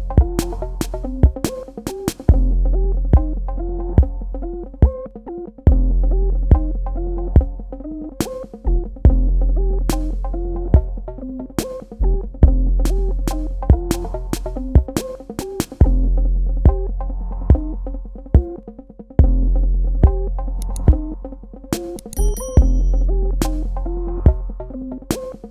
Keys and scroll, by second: 4.7 [, 6.0 space, 11.0 space, 12.4 space, 14.9 Delete, 15.9 space, 17.9 space, 23.3 space.